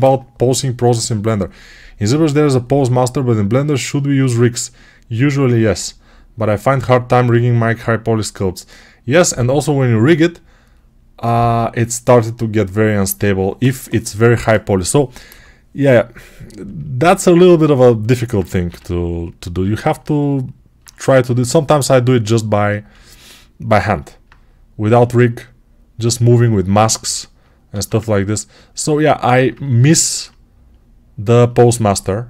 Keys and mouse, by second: 15.2 6, 18.2-21.5 alt+right drag, 18.5 g, 27.3-31.7 alt+right drag, 27.6 alt+q, 31.7-32.2 alt+drag.